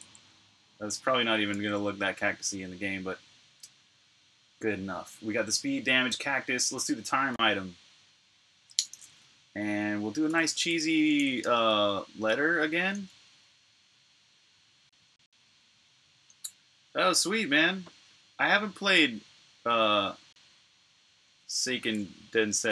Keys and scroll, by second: 7.4 super+Tab, 10.1-12.7 typing, 14.8-15.5 typing, 22.3-22.7 typing.